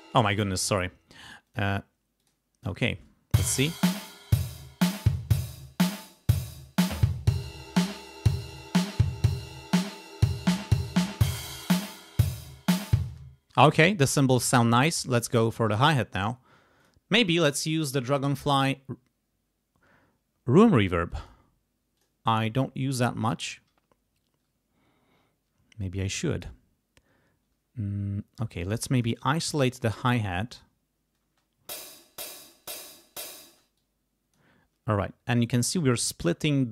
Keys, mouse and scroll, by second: 0.1 click, 1.4 click, 2.1 click, 2.6 click, 2.8 space, 13.0 space, 14.8 click, 15.8 right click, 16.8 click, 21.0 click, 21.9 click, 23.2-26.6 drag, 28.8 click, 29.5 click, 30.2 click, 31.2 space, 32.5 click, 32.9 click, 33.4 space, 33.7 click.